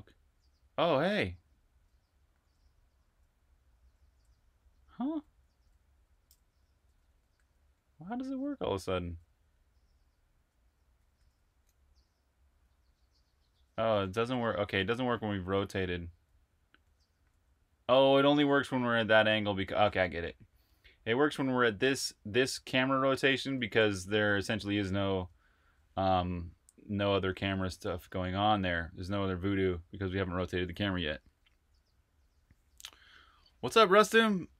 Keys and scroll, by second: 1.3-11.0 typing, 12.3-24.3 typing.